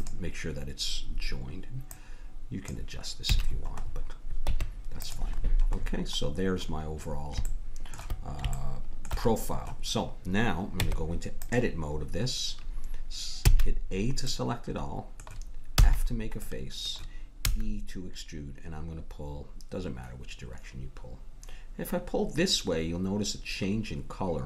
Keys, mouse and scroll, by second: 1.8-2.9 drag, 3.3 a, 4.4 Tab, 7.5 middle click, 10.7 Tab, 13.5 a, 15.7 f, 17.4 e.